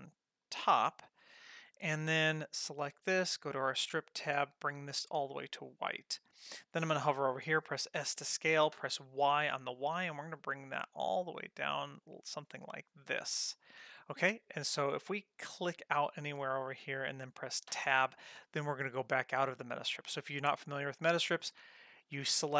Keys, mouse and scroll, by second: 0.8 middle click, 1.8 click, 3.3 click, 4.6-5.1 drag, 8.0 s, 15.5 click, 17.9 Tab.